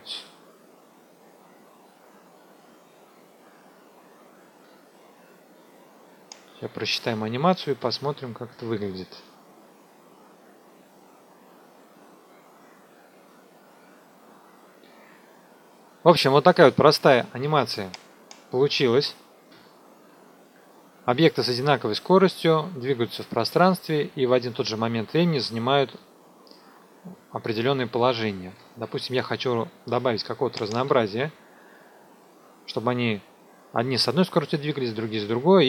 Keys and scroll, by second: 6.9 n, 7.8 KP_0, 14.5 KP_0, 19.5 KP_0, 28.4 KP_0.